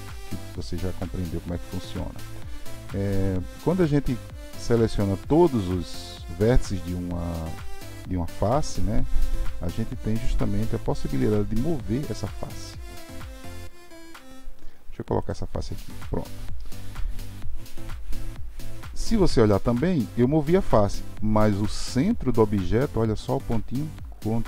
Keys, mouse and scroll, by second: 4.9 shift+click.